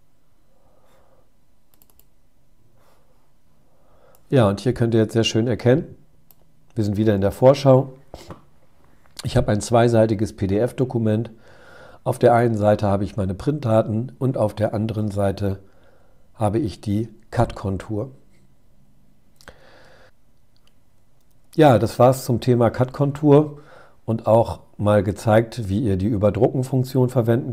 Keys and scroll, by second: 18.8 super+Tab, 20.2 super+0.